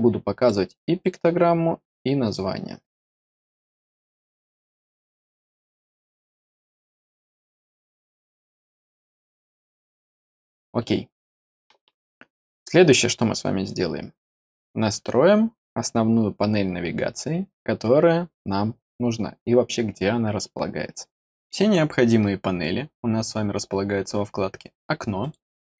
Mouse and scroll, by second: 0.3 click, 1.0 right click, 2.2 click, 2.8 click, 3.5 click, 4.1 click, 4.9 click, 5.7 click, 6.7 click, 7.3 click, 8.1 click, 9.0 click, 25.1 click.